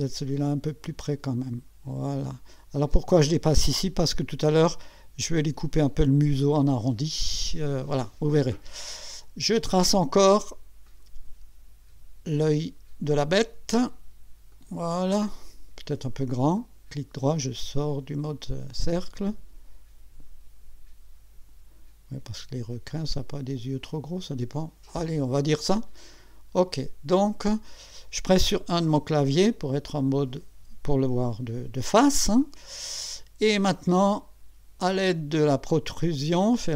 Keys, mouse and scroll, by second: 0.3-3.2 drag, 10.9 click, 13.2 click, 14.5 click, 16.6 right click, 18.1 click, 26.1 click, 28.9 1, 31.6-31.9 scroll down 2, 32.4-33.1 right drag.